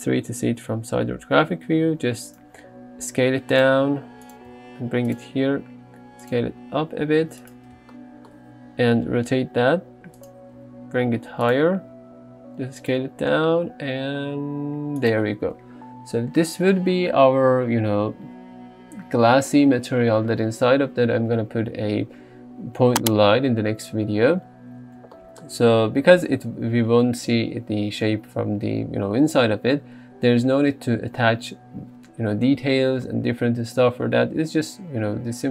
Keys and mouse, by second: 0.2 KP_3, 1.8 g, 2.6 s, 3.6 click, 3.9 s, 4.6 g, 5.4 s, 6.3 click, 6.9 s, 8.9 r, 10.6 g, 11.8 s, 12.9-13.6 drag, 13.6 g.